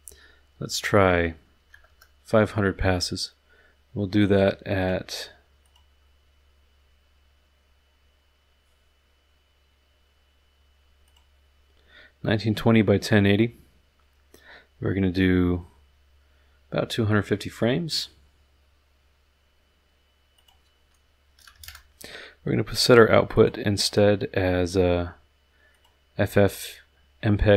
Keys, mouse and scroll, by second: 1.5 KP_5, 1.7 KP_0, 4.2 click, 4.8 click, 5.6 click, 11.1 click, 20.3 click, 21.3 KP_2, 21.5 KP_5, 21.6 KP_0, 23.3 click, 23.8 click, 25.7 click.